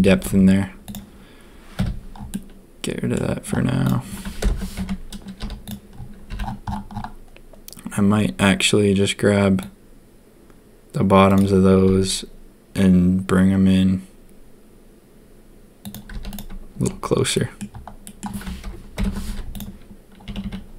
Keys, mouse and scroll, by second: 0.1 a, 0.2 Tab, 1.7 h, 2.3 click, 4.4 ctrl+KP_1, 4.8 Tab, 5.3 z, 6.2 c, 11.8 s, 16.1 z, 17.3 middle click, 18.0 click, 18.9 ctrl+KP_3, 19.2 z, 19.5 middle click, 20.2 a, 20.4 a.